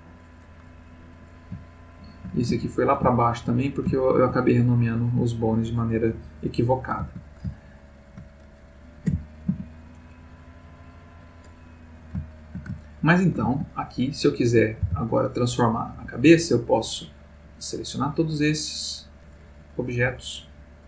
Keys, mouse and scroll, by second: 1.1 click, 1.7-3.7 shift+middle drag, 4.0 ctrl+shift+middle click, 7.6-8.4 ctrl+middle drag, 9.1 g, 9.5 z, 11.0 click, 12.2-13.6 shift+middle drag, 14.0 shift+click, 14.8 r, 15.9 Escape, 16.8-18.2 drag, 19.2 click, 20.1-20.8 drag.